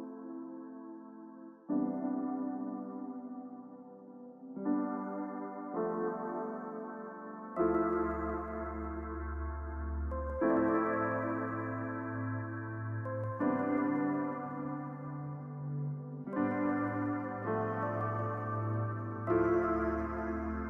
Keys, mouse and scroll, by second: 0.0-0.8 typing, 10.8-13.3 scroll down 1, 16.5-18.5 scroll down 1.